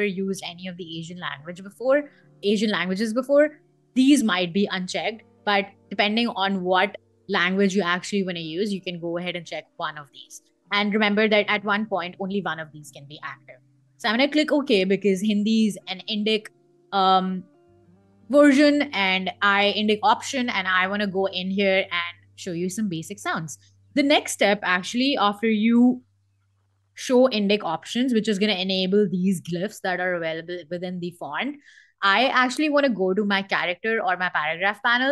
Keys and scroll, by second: 16.9 super+Tab, 18.2 super+Tab.